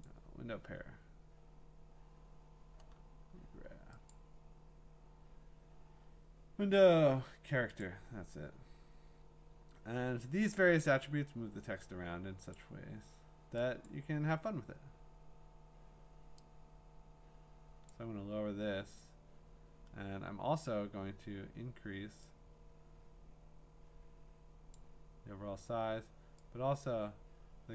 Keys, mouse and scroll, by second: 0.1 click, 2.5 click, 4.1-7.3 drag, 7.8-10.9 drag, 12.5 click, 13.8 click, 15.8-17.0 drag, 17.9-21.0 drag, 22.4 click, 24.7-27.7 drag.